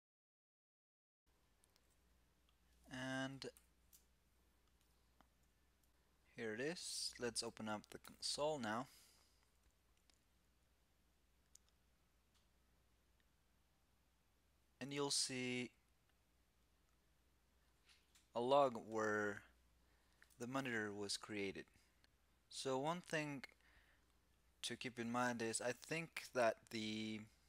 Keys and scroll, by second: 3.2 ctrl+alt+super+Left, 7.7 alt+super+i.